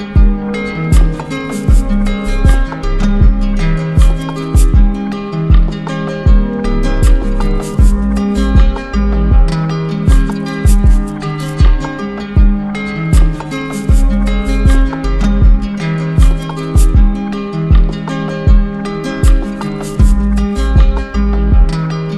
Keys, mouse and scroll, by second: 1.1-2.2 drag, 3.2-4.9 typing, 6.2 typing, 6.7 Return, 7.7 t, 10.7-11.7 drag, 12.7-13.9 drag, 14.8-15.8 drag, 17.7 click, 20.0 click.